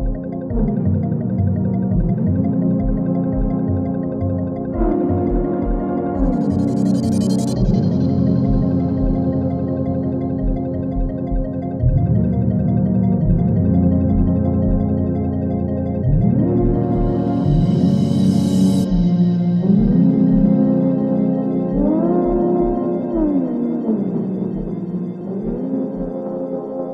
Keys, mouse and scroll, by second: 3.5 space, 5.9-6.5 drag, 7.9 space, 9.1-9.7 drag, 14.6-16.3 drag, 16.6 scroll up 1, 17.2 click, 19.7 space, 21.8 space, 26.4-26.9 click, 26.8 space.